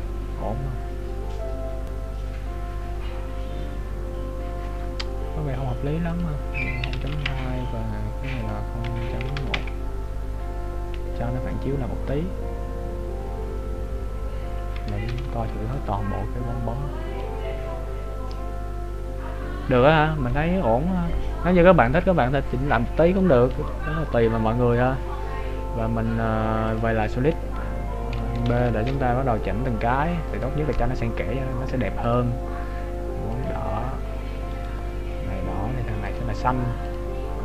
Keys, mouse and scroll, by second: 0.6-1.1 scroll up 2, 6.1 click, 15.3 ctrl+b, 24.9 click, 28.7 ctrl+alt+b, 30.4 right click, 31.2 scroll up 1, 32.2 click, 32.2-33.0 scroll up 2, 34.8 right click, 36.1 click.